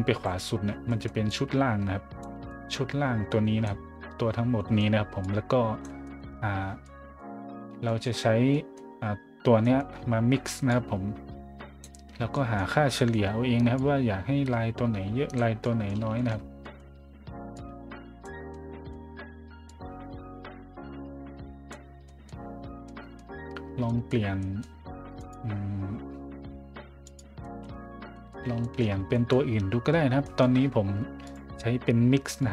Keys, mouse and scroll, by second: 0.6 scroll down 1, 0.9 scroll up 1, 1.3-2.2 drag, 2.4-3.6 drag, 3.8 scroll down 1, 4.4 scroll down 1, 4.6 scroll up 1, 5.2 click, 6.0 middle click, 6.3 middle click, 6.8-7.2 middle drag, 7.8 middle drag, 8.5 scroll up 1, 9.6 scroll up 1, 10.7-11.8 drag, 12.1 scroll down 1, 12.3 scroll up 1, 12.4 middle click, 12.9 middle drag, 13.8-15.4 drag, 15.6 middle drag, 16.2 shift+middle drag, 16.6 middle drag, 17.5 click, 18.5-18.9 middle drag, 19.6-21.7 drag, 22.0 middle drag, 22.5 scroll down 1, 22.9 middle drag, 23.2 middle click, 23.6 scroll up 1, 23.9 middle drag, 24.4 middle drag, 25.2 right click, 27.0 right click, 27.4 middle drag, 27.7 middle click, 28.0 middle drag, 28.6 shift+middle drag, 28.9 middle click, 29.1 middle click, 30.2 middle click, 31.2 click, 32.4 click.